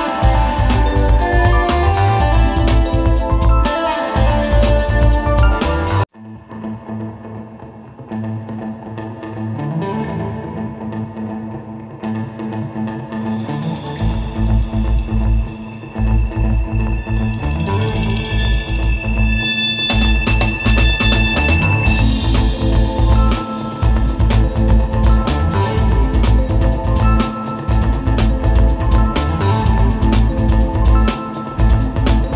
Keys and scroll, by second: 0.0 super+space, 2.5 space, 7.3 alt+z, 8.6 space, 10.9 super+z, 12.0 super+z, 12.8 super+z, 13.4 super+z, 16.6 space, 17.0 space, 18.1 space, 18.4 space, 21.2 space, 21.9 space, 22.6 space, 24.1 space, 24.8 space, 25.6 space, 25.8 space, 28.4 space, 29.1 space, 29.7 space, 31.7 space.